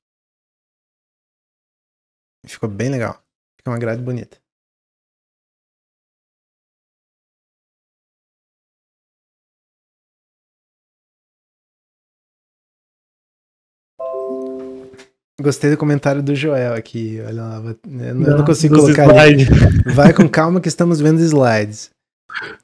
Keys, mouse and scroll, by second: 0.3-1.1 middle drag, 1.1-1.5 scroll down 1, 1.5-4.5 middle drag.